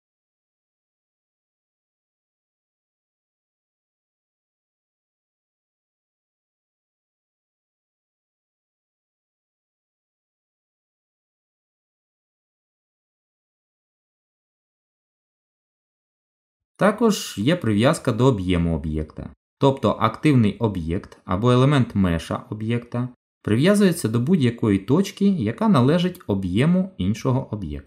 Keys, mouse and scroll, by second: 1.2 click, 2.1 click, 2.5 middle click, 4.1 g, 8.9 middle click, 11.3 ctrl+z, 12.7 Tab, 13.2 middle click, 17.9 click, 21.4 middle click, 24.6 g.